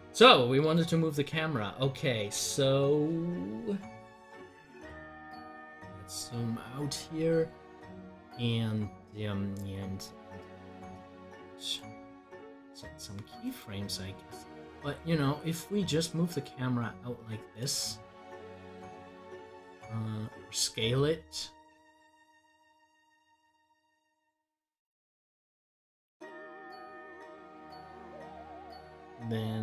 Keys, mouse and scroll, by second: 7.0 click, 9.4 scroll down 1, 17.5 click, 21.9-27.0 drag, 27.3 scroll down 1.